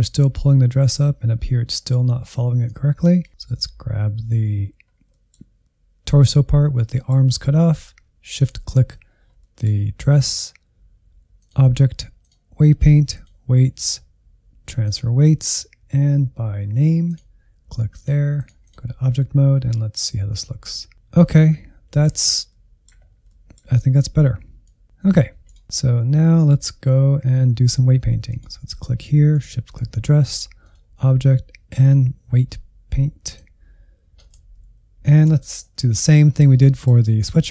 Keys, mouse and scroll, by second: 1.7-2.7 scroll up 1, 2.7 click, 3.4-4.7 drag, 4.7 scroll down 1, 5.0-8.3 middle drag, 8.3-9.3 shift+drag, 9.3-11.3 middle drag, 11.3-16.1 drag, 17.0-21.9 drag, 21.9-23.0 middle drag, 23.0 scroll up 1, 23.1 middle click, 23.8-25.1 drag, 25.2-28.2 middle drag, 28.2-34.3 drag, 34.3 alt+z, 34.9 middle click, 35.2 scroll up 2, 35.5 ctrl+middle click, 36.4-37.5 scroll up 4, 36.6 shift+middle click.